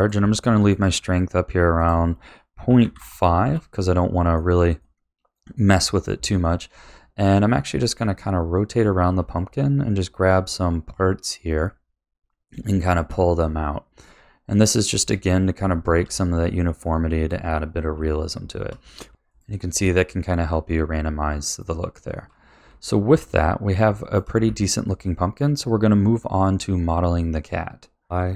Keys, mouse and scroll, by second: 0.3-1.9 shift+middle drag, 1.9 click, 3.8-8.0 middle drag, 8.0 click, 9.0 middle click, 10.3 click, 11.0 click, 11.9 middle click, 12.6 shift+middle click, 13.2 middle click, 14.1 click, 14.8 middle click, 15.7 shift+middle click, 16.3 click, 16.9 click, 17.2 middle click, 18.1 shift+click, 19.3 shift+middle click, 20.5 click, 21.1 click, 21.5 middle click, 22.2 shift+middle click, 22.7 middle click, 23.4 click, 23.8 click, 24.2 middle click, 24.8 shift+middle click, 26.4 click, 28.0 click.